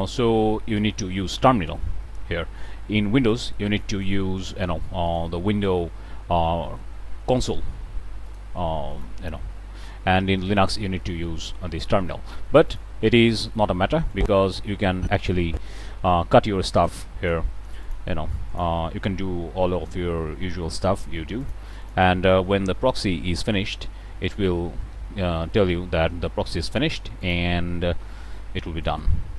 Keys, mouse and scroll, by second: 3.2 click, 5.1 click, 8.2 click, 8.9 click, 10.1 click, 12.7 click, 18.5 shift+click, 19.9 k, 20.9 click, 21.4 shift+click, 21.8 shift+click, 22.7 g, 26.6 click, 27.2 click, 27.8-28.4 middle drag, 28.8-29.3 drag.